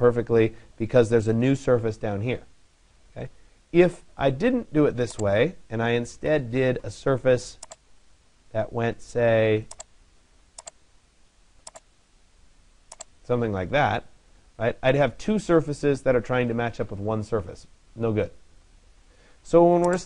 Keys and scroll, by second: 5.8 Delete.